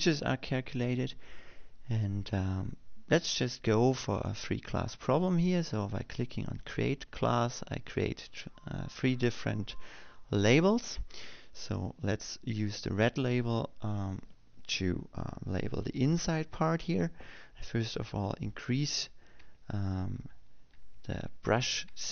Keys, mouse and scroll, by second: 8.5 click, 14.3 click, 21.1 m, 21.9 m.